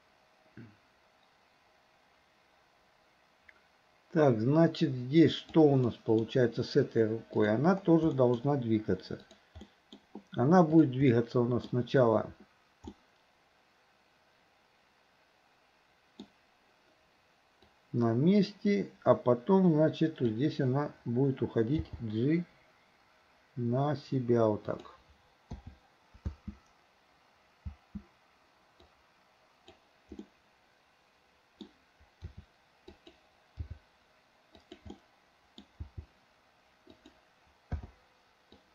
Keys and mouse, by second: 5.9-6.3 middle drag, 7.4 click, 8.2 middle drag, 9.2 click, 9.6-10.0 middle drag, 10.8 click, 11.1-11.7 middle drag, 13.0-16.2 middle drag, 17.7-20.4 drag, 21.8 g, 25.6 i, 26.3 space, 28.9-29.9 drag, 30.3-31.6 middle drag, 32.3 r, 33.6 g, 35.0-35.6 middle drag, 35.9 g, 37.8 i, 38.6-38.7 drag.